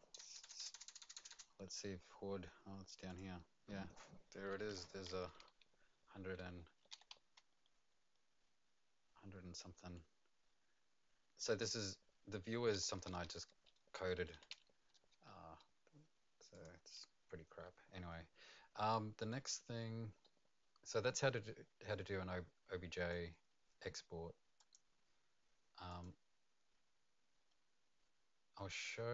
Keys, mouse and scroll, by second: 0.2 KP_Enter, 0.4 KP_Enter, 0.6 KP_Enter, 0.7 KP_Enter, 0.8 KP_Enter, 1.0 KP_Enter, 1.1 KP_Enter, 1.3 KP_Enter, 3.0 click, 5.1-8.6 typing, 8.0 click, 13.0-15.6 typing, 16.5 click, 20.2 middle click, 21.4 right click, 24.6 click, 25.9 click, 28.7 click.